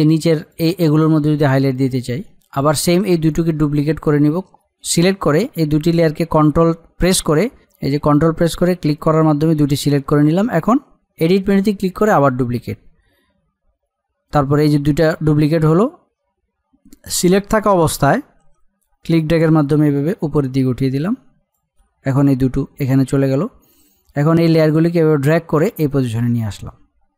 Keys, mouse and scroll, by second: 1.6 middle click, 2.4 click, 7.6 click, 18.8-23.9 drag, 24.4-27.1 drag.